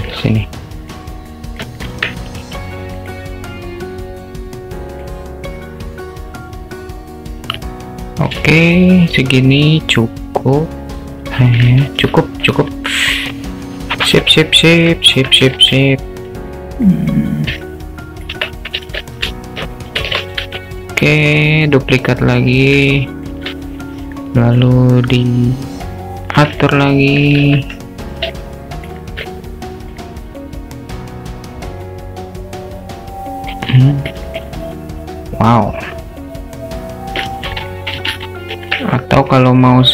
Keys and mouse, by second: 0.2-0.9 alt+middle drag, 1.3-1.6 alt+middle drag, 4.0-5.2 drag, 5.9-8.4 drag, 8.5-11.8 alt+middle drag, 15.2 Tab, 15.6 alt+z, 15.8 click, 17.0-18.3 drag, 18.6 Tab, 18.9 alt+z, 20.0 shift+d, 23.0 alt+shift+middle drag, 24.5-26.5 drag, 26.7-27.2 middle drag, 27.4 ctrl+z, 28.4-29.0 alt+middle drag, 29.3-30.1 alt+middle drag, 30.6-33.6 drag, 33.8-34.2 alt+middle drag, 34.2 click, 34.6-37.2 alt+middle drag, 37.8 middle drag, 38.1 ctrl+z, 38.5 ctrl+z, 39.3 s.